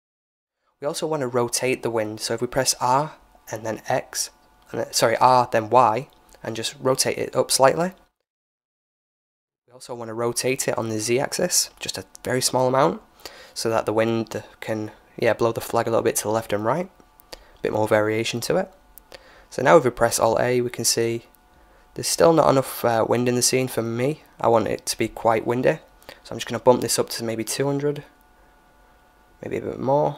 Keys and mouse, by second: 4.6-6.5 middle drag, 7.9-9.7 middle drag, 9.2 KP_7, 10.4 r, 12.4-14.1 middle drag, 16.2-17.9 middle drag, 17.7-19.5 drag, 18.5 alt+a, 22.1 KP_0, 26.6-28.4 drag.